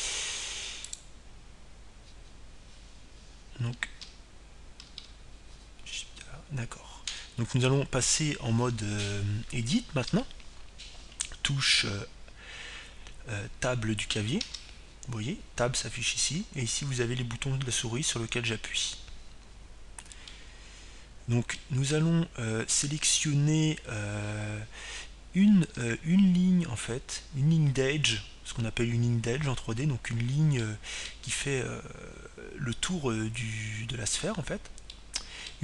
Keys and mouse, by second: 2.5-4.4 drag, 6.4 shift+a, 11.7 n, 16.5 Tab, 21.9-23.8 middle drag, 27.9 a, 32.3-34.4 middle drag.